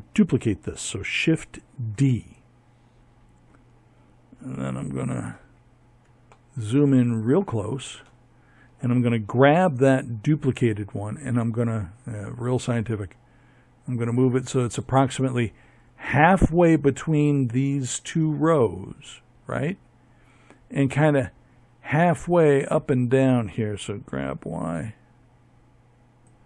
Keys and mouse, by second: 7.7 g, 21.9 g, 25.6 middle click.